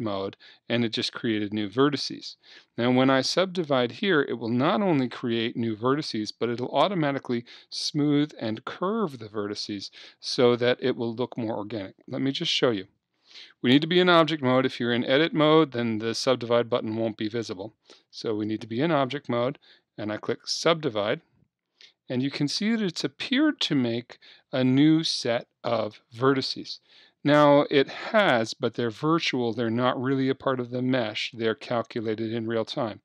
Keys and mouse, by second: 15.2 Tab, 16.8 Tab, 18.0 Tab, 20.5-33.0 drag.